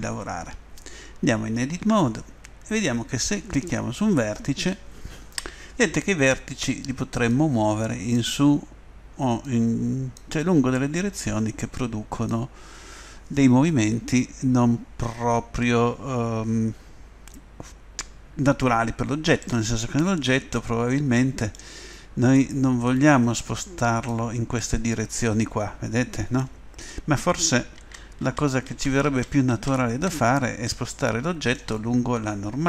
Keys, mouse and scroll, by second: 1.8 Tab, 3.5-5.0 right drag, 7.3-9.0 drag, 9.4-11.1 drag, 11.2-12.9 drag, 19.4 middle click, 20.9 middle click, 23.4 middle click, 24.3 click, 24.6 middle click, 25.0 click, 25.1 middle click, 25.9 click, 27.8 ctrl+z, 28.2 ctrl+z, 28.7 ctrl+z, 29.1 ctrl+z, 29.5 ctrl+z, 30.7 middle click, 31.3 middle click, 31.4 middle click.